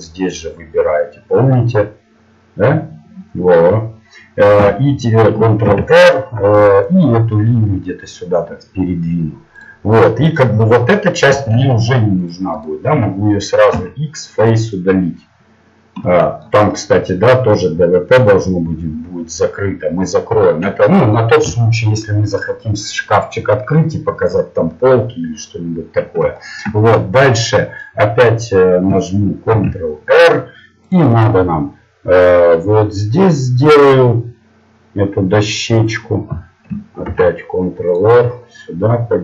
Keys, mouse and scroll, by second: 4.8 t, 5.7 ctrl+r, 9.9-11.7 middle drag, 12.2 ctrl+Tab, 14.7 x, 18.5-19.9 middle drag, 25.8-28.5 middle drag, 29.5 ctrl+r, 37.1 ctrl+r.